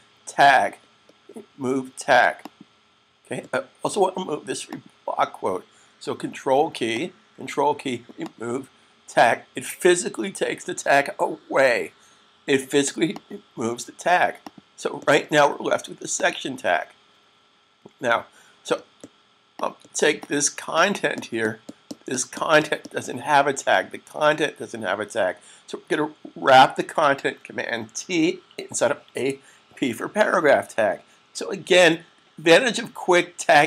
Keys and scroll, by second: 27.7 super+t, 29.5 p.